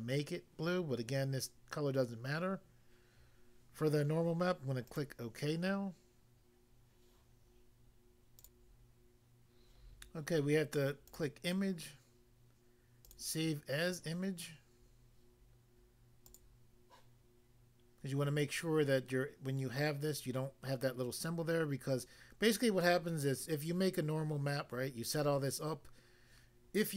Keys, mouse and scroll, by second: 4.9 click, 5.0 click, 8.4 click, 9.7 click, 11.1 click, 11.2 click, 13.1 click, 13.1 click, 16.2 click, 16.3 click.